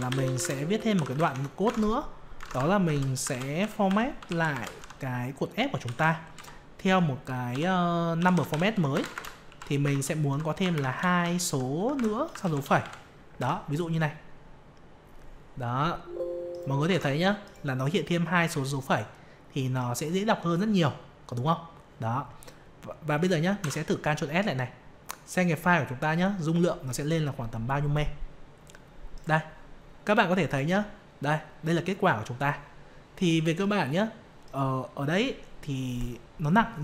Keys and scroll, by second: 1.6 alt+Tab, 13.3 F5, 16.9 alt+Tab, 23.6 ctrl+s.